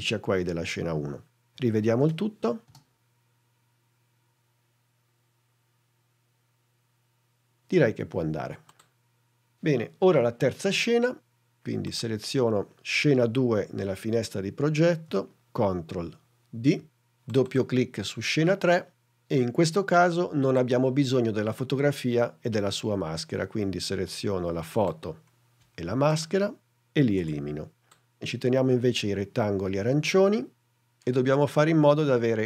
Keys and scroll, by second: 2.6 space, 16.4 super+d, 27.4 BackSpace.